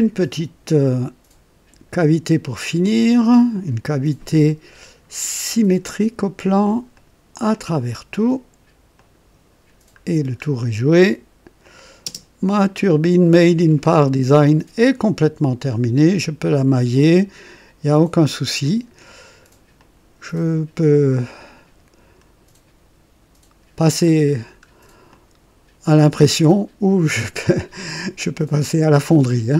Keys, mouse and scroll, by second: 2.8 click, 5.5 click, 7.0 click, 7.6 click, 9.0 click, 10.2 scroll up 2, 11.6 click, 12.1 space, 12.3 space, 12.7-13.0 scroll up 2, 13.3-13.8 right drag, 13.9-15.9 drag, 17.0-19.7 drag, 19.1 right click, 19.8-21.1 drag, 21.3-24.2 drag, 24.4 scroll down 1, 25.1-28.9 drag.